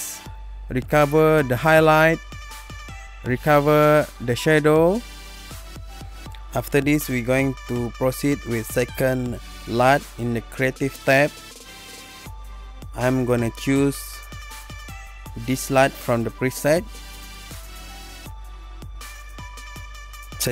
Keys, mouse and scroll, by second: 2.1 click, 4.5 click, 7.1 click, 9.8 click, 10.7-11.1 scroll, 11.1-12.1 scroll down 3, 12.3-15.7 scroll, 15.8 click, 20.4 click, 20.4 click.